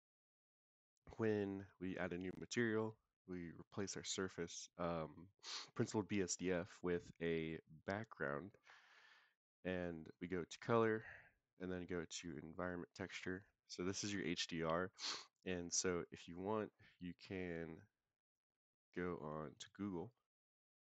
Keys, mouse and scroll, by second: 1.0 click, 1.9 click, 3.9-8.3 drag, 10.0 click.